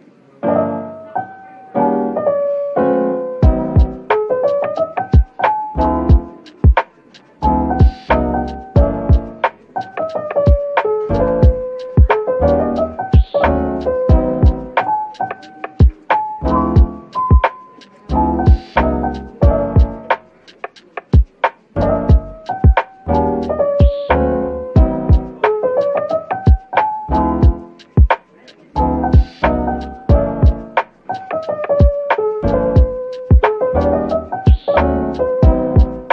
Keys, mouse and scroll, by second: 6.2 Tab, 8.3-9.2 typing, 11.6 typing, 12.1 ctrl+l, 13.2 typing, 15.5 typing, 17.0 Tab, 17.5-19.1 typing, 20.7-22.4 typing, 24.2 typing, 26.0 scroll down 1, 26.8 typing, 27.2-27.6 scroll up 1, 27.9 typing, 28.1 scroll up 1, 29.6 middle click, 31.3 scroll down 1.